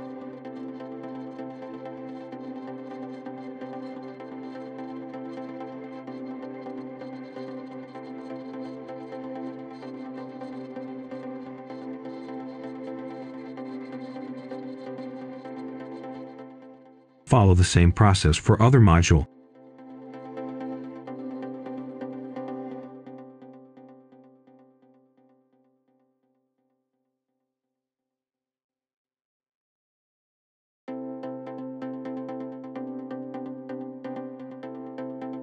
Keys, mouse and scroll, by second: 0.0-0.2 typing, 1.0 click, 2.4-2.8 scroll down 1, 2.8 right click, 4.1 click, 5.3-10.8 right drag, 11.8 click, 13.1 scroll down 1, 13.4 scroll up 1, 13.6 right click, 14.2-15.9 typing, 16.5 scroll down 1, 16.9-17.4 scroll up 1, 17.4 click, 17.7 right click, 18.9 scroll up 1, 19.2 click, 20.0 Return, 20.8 click, 21.1 right click, 21.6 shift+click, 22.0 scroll up 1, 22.2 right click, 22.3 scroll down 1, 22.4 right click, 22.5 scroll up 1, 22.7 ctrl+right click, 23.2 ctrl+shift+click, 23.8-24.6 typing, 23.8 scroll up 1, 24.7 click, 24.8-25.1 scroll down 1, 25.2 shift+click, 25.7 shift+click, 26.0 click, 26.6 right click, 26.9 Tab, 27.3-27.6 scroll up 1, 27.8 ctrl+shift+click, 28.3-28.8 scroll down 1, 28.8 click, 28.9-29.7 typing, 29.7-30.0 scroll up 1, 30.0 click, 30.5 shift+click, 31.0-31.9 typing, 31.8 click, 32.5 right click, 32.7 Tab, 33.3 click, 33.6 right click, 34.6 scroll up 1, 34.7 right click.